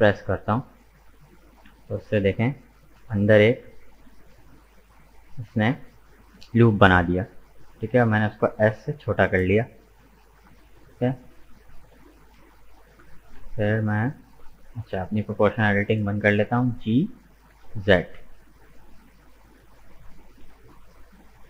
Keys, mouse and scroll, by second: 6.1-7.2 scroll up 2, 7.2 shift+middle click, 7.9-8.9 scroll up 2, 8.9-10.7 shift+middle drag, 10.7-12.2 drag, 12.2 right click, 13.4 g, 15.2-16.5 drag, 16.5 g.